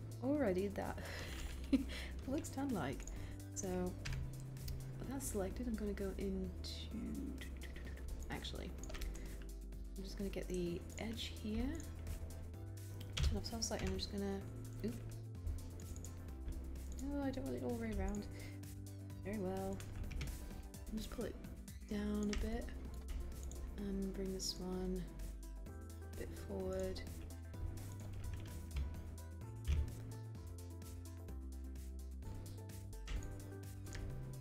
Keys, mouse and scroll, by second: 20.1 w, 29.7 r.